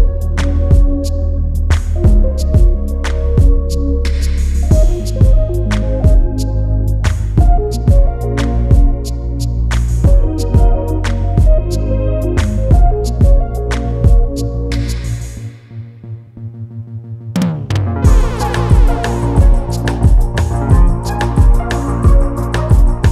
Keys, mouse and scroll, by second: 9.3 scroll up 1, 10.6 click, 12.4 click, 15.4 scroll down 1, 16.0 click, 18.4 g, 19.4 click, 22.9 scroll up 1.